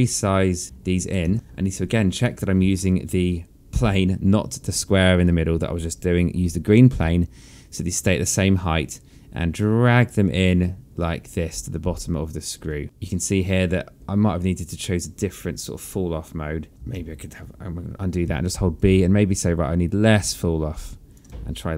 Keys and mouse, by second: 0.6 click, 1.7 z, 1.9 alt+click, 3.5 alt+middle click, 7.7 click, 13.1 alt+click, 14.7 click, 19.0 b, 19.5 click.